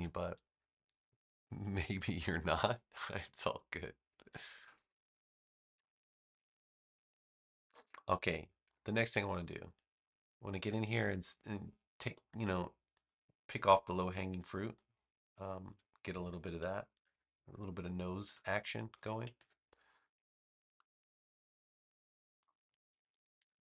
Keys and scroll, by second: 5.8 space, 17.0 super+x, 17.4 space, 19.3 super+v, 23.3 super+=.